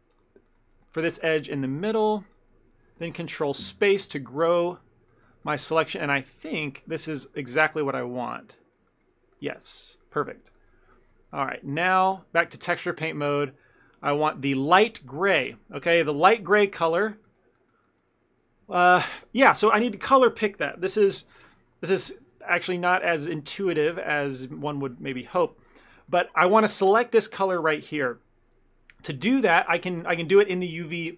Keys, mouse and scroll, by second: 0.2 shift+click, 0.5 shift+middle click, 1.7 ctrl+middle click, 2.3 ctrl+click, 4.4 ctrl+middle click, 4.6 shift+middle click, 6.2 ctrl+middle click, 7.1 middle click, 8.9 shift+middle click, 9.7 middle click, 10.1 ctrl+middle click, 10.3 shift+middle click, 11.0 ctrl+middle click, 11.4 middle click, 12.1 ctrl+middle click, 12.5 Tab, 14.0 scroll down 1, 15.4 ctrl+middle click, 16.4 shift+middle click, 16.6 middle click, 17.3 ctrl+middle click, 23.1 ctrl+middle click, 24.0 shift+middle click, 25.0 ctrl+middle click, 25.8 shift+middle click, 26.2 ctrl+middle click.